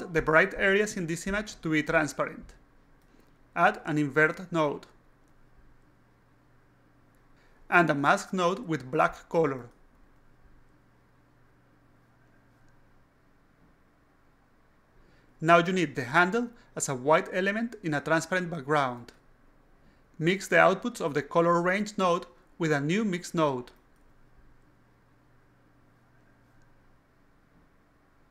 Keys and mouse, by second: 5.0 click, 5.8 click, 7.2 click, 7.7-9.1 drag, 9.5 click, 10.2 click, 10.9 click, 11.6 click, 12.8 drag, 13.5 click, 14.0 click, 15.0 click, 16.1 click, 17.5-18.8 drag, 20.0 click, 20.4 click, 21.6 alt+click, 22.3 click, 23.4 click, 24.7 click, 25.7 click, 26.8 click, 27.2 click, 28.2 click.